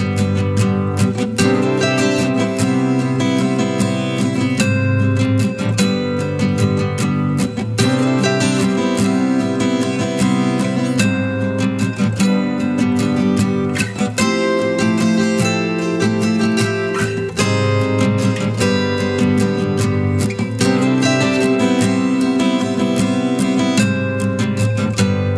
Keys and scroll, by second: 1.8 ctrl+j.